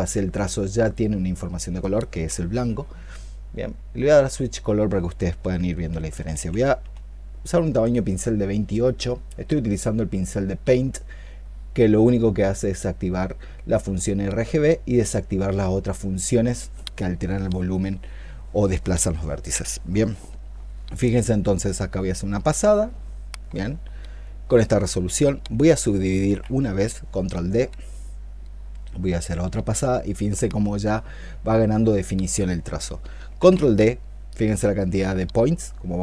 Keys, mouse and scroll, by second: 5.8 ', 5.9 ', 6.2 ', 6.6 ', 26.1 ctrl+d, 33.2 ctrl+d.